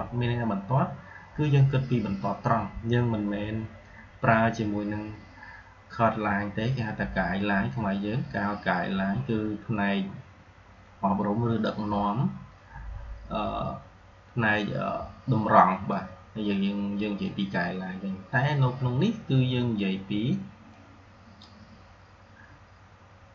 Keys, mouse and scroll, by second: 15.8-17.3 drag, 20.6-21.5 drag.